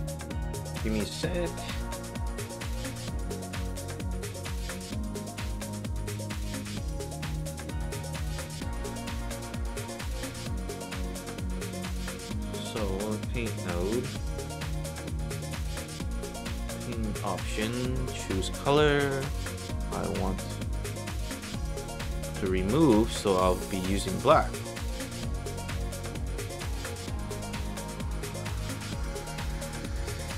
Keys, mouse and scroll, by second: 11.8 click, 12.0 click, 15.6-17.0 drag, 18.5 click, 19.9-20.6 drag, 22.4 click, 26.8 alt+middle drag.